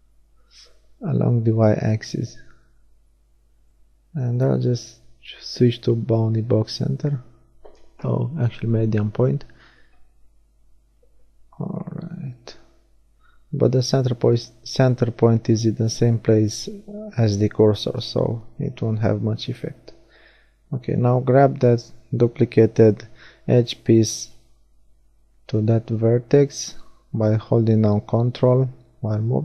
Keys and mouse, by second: 2.4 middle click, 4.3-7.6 middle drag, 7.6 r, 12.3-14.4 middle drag, 14.9 middle click, 18.4 g, 26.0-29.4 drag, 29.1 g.